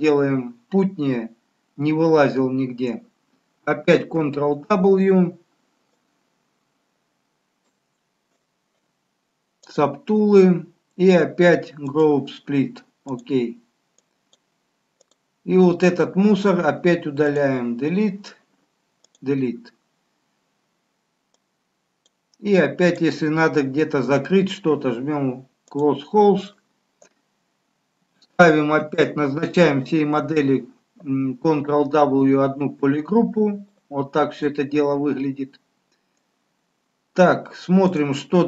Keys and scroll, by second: 4.4 ctrl+w, 28.8 ctrl+w.